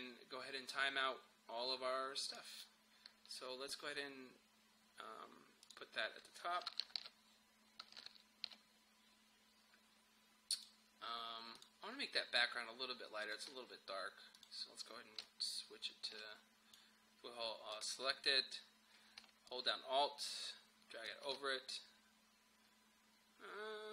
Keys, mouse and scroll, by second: 6.8 shift+Down, 8.0 shift+Down, 10.5-17.8 drag, 19.5-23.9 alt+drag.